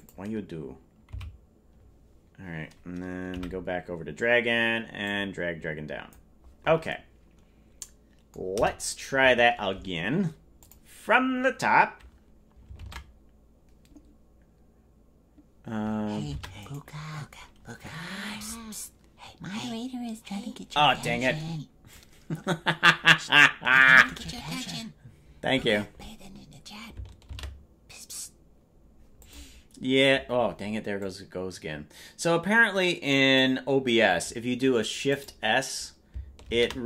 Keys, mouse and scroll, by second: 1.2 Left, 1.2 i, 5.0-7.8 drag, 10.5 click.